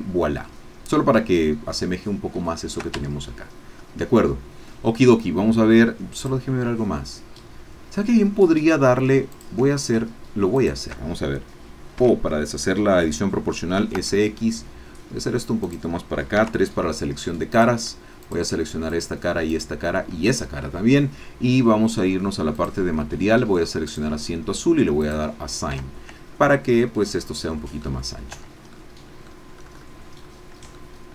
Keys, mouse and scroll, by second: 2.6 shift+middle click, 3.1 shift+Tab, 3.7 scroll up 2, 6.2 click, 9.3 click, 10.8 shift+click, 12.0 o, 13.7 s, 14.0 x, 15.6 click, 16.5 3, 17.5 click, 18.2 shift+click, 19.1 shift+click, 19.5 shift+click, 22.5 click, 23.9 click, 25.0 click, 25.7 Tab, 26.3 scroll down 1, 26.7-28.0 middle drag, 28.4 Tab, 28.7 middle click, 29.5-30.1 scroll up 1, 30.7-31.1 shift+middle drag.